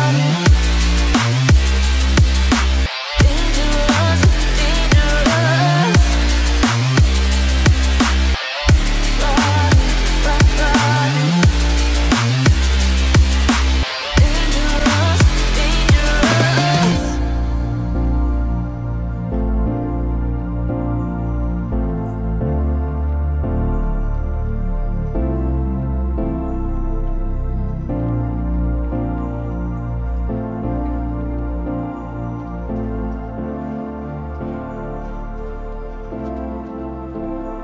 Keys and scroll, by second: 8.6 ctrl+0, 15.3 ctrl+alt+z.